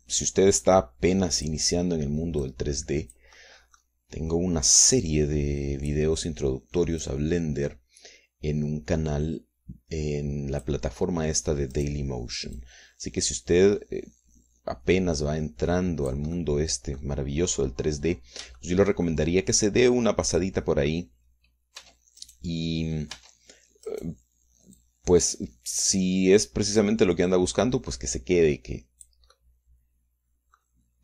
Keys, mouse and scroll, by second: 1.6-2.7 drag, 3.4 click, 4.3 middle click, 5.8-7.1 drag, 8.0-11.8 drag, 12.7 right click, 14.8-17.3 drag, 17.3 middle click, 18.1-19.1 scroll up 1, 19.1 scroll down 1, 19.3 scroll up 1, 19.6 shift+middle click, 20.4-22.4 middle drag, 22.8 Tab, 23.2 click, 24.1 Tab, 24.9 click, 25.8-27.1 drag, 27.8-30.3 drag, 30.3-31.0 drag.